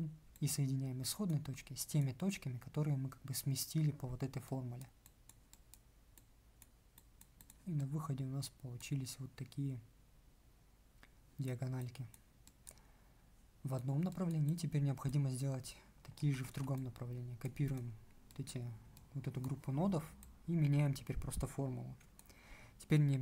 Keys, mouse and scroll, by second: 16.1 ctrl+c, 16.3 ctrl+v.